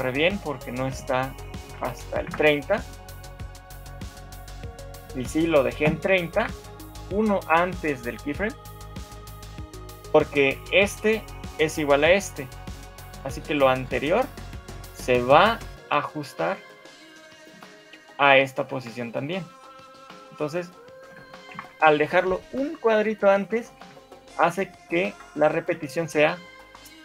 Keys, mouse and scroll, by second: 6.5 shift+Right, 6.5 middle click, 6.5 scroll down 4, 14.7 right click, 19.9 right click, 21.7 shift+Left, 23.9 alt+a.